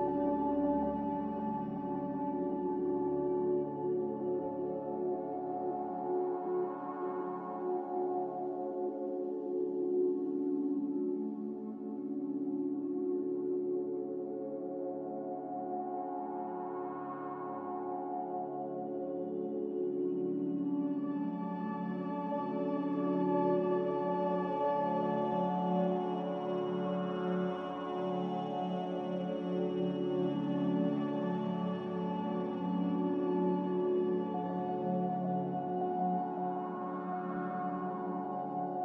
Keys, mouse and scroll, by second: 0.0-0.1 typing, 2.6 Return, 2.7-3.4 typing, 5.6 q, 6.4 q, 10.4-11.2 typing, 13.6-14.7 typing, 17.8 c, 19.8 n, 21.7-22.4 typing, 34.8 q, 36.4 q.